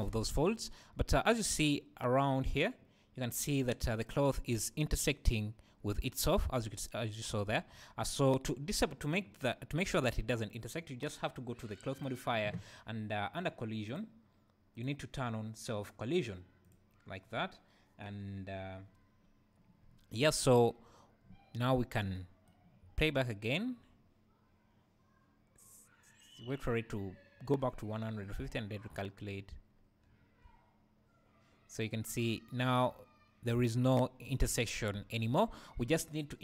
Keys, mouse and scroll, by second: 0.8 scroll up 1, 8.0 Escape, 8.5-11.9 right drag, 11.9 click, 12.7-13.8 scroll down 1, 13.8 click, 14.7-18.8 drag, 15.1-16.6 scroll down 2, 18.8-19.8 scroll down 2, 19.8-21.2 scroll down 1, 21.2-22.1 scroll down 1, 22.1-36.4 right drag, 22.8 space, 29.7-30.1 scroll down 2, 30.1 `, 32.2-35.4 scroll up 2, 35.8 Escape.